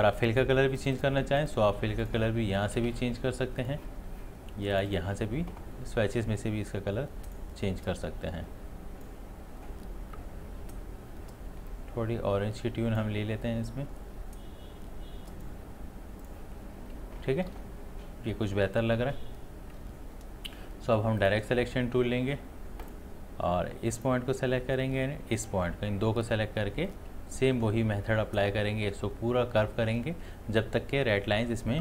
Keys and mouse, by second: 11.7-16.2 drag, 21.2-31.8 drag.